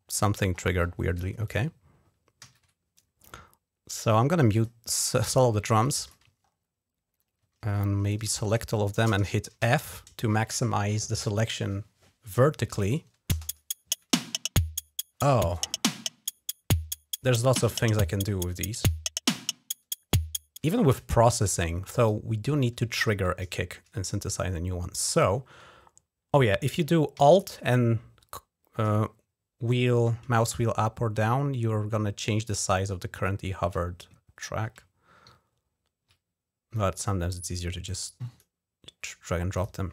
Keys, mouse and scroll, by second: 0.3-0.8 scroll up 2, 1.2 click, 2.2 ctrl+s, 4.3 click, 5.6 click, 6.2 ctrl+scroll up 1, 6.8 scroll down 2, 7.8 click, 8.2 shift+click, 9.4 f, 13.2 space, 20.4 space, 21.7 click, 25.6-26.2 scroll down 2, 27.2-28.2 scroll down 3, 28.8 alt+scroll up 2, 29.5 alt+scroll up 2, 30.3-33.0 alt+scroll down 9, 33.6-34.1 scroll down 4, 34.9 alt+scroll up 3, 36.5-38.2 drag, 39.3 click.